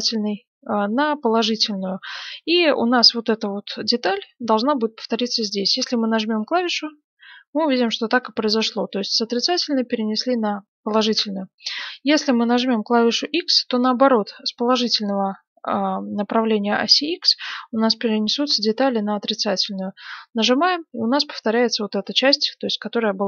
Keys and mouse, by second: 6.5-11.0 drag, 11.0 ctrl+z, 19.7-22.2 drag, 22.2-23.2 middle drag.